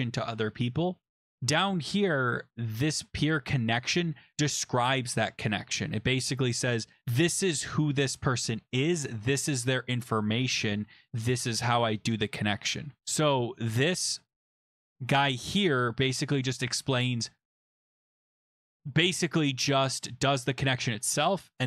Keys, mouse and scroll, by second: 0.9-2.7 scroll, 2.8 click, 2.9 click, 6.2 scroll down 10, 13.0-13.8 scroll down 14, 14.8-15.2 scroll, 15.2 click, 15.5 click, 16.5 click, 20.8-21.4 scroll down 9, 21.4 scroll.